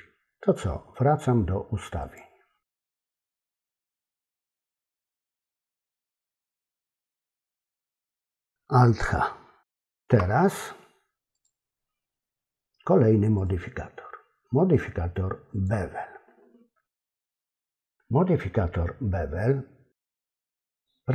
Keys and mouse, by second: 2.2-5.5 drag, 9.7 alt+h, 11.3 click, 13.4 click, 15.6 click.